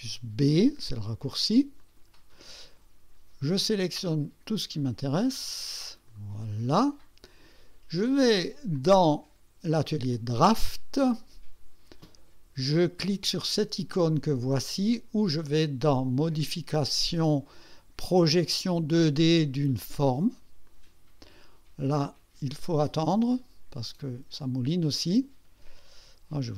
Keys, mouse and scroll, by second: 1.8 click, 3.6-6.3 drag, 8.7 click, 10.1 click, 16.2 click, 20.7 click, 24.4-25.3 drag.